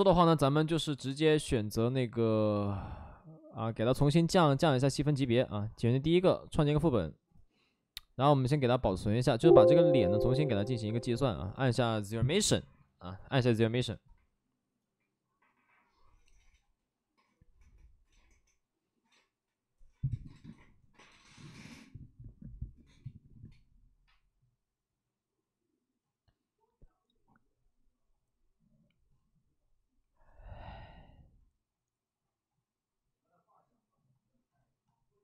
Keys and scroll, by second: 0.1 alt+s.